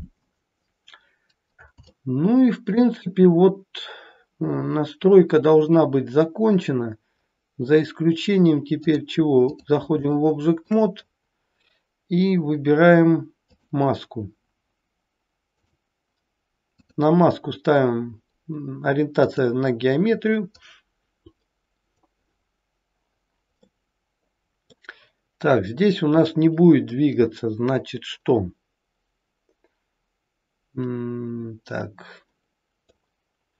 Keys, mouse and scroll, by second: 0.5-1.7 scroll down 3, 1.9 shift+middle click, 3.1-3.6 scroll down 1, 7.2-7.7 scroll up 2, 7.7-8.6 scroll down 1, 8.7 click, 10.1 shift+middle click, 11.1-12.0 scroll up 3, 13.4 click, 16.7 click, 18.6 click, 20.6 click, 23.6 middle click, 26.9 middle click.